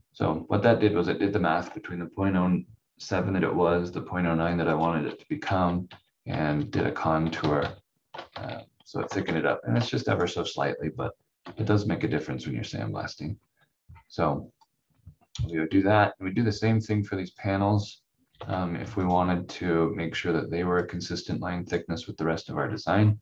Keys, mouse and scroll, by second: 4.7 click, 5.8 ctrl+z, 6.7 ctrl+z, 7.4 ctrl+shift+z, 7.6 ctrl+shift+z, 8.3 ctrl+z, 8.4 ctrl+z, 9.0 ctrl+shift+z, 9.2 ctrl+shift+z, 11.4 F4, 13.1 scroll up 1, 14.6 click, 18.3 f, 19.0 click, 22.4-23.2 scroll up 1.